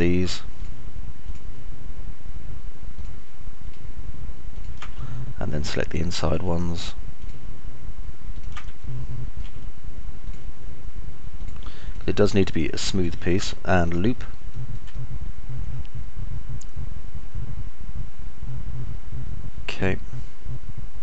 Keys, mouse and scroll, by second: 3.3 ctrl+right click, 4.9 ctrl+right click, 5.3 alt+click, 5.3 alt+middle click, 5.3 alt+right click, 7.4 ctrl+right click, 8.8 ctrl+right click, 9.1 alt+click, 9.1 alt+middle click, 9.1 alt+right click, 11.8 ctrl+right click, 13.3 ctrl+right click, 15.3-20.6 alt+drag, 15.3-21.0 alt+middle drag, 15.3-20.6 alt+right drag.